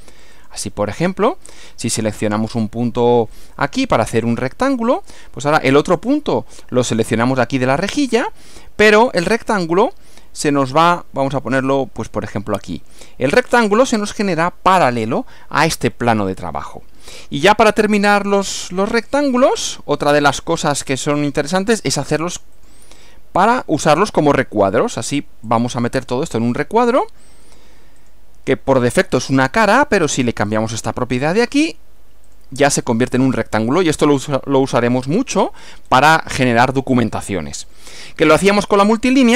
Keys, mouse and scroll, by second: 0.4 click, 3.4 click, 13.5 click, 16.0-17.7 middle drag, 19.0 click, 21.2 click, 22.6 click, 25.5 click, 26.5-27.7 middle drag, 28.0 click, 30.0 click, 30.6 click, 31.4 click, 32.3 click, 32.9-34.4 middle drag, 35.9 scroll down 1, 36.3 scroll up 1, 37.2-38.5 middle drag.